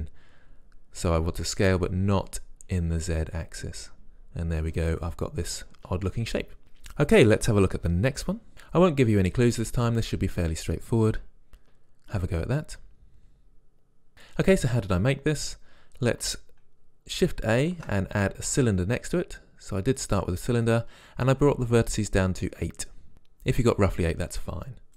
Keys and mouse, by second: 6.6 Tab, 15.4-17.3 drag, 17.8 shift+a.